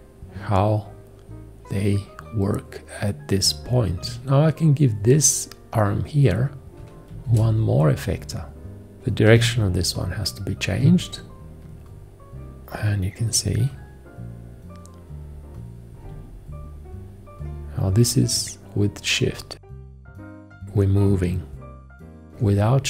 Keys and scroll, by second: 7.3 shift+F1, 9.3 h, 11.4 ctrl+z.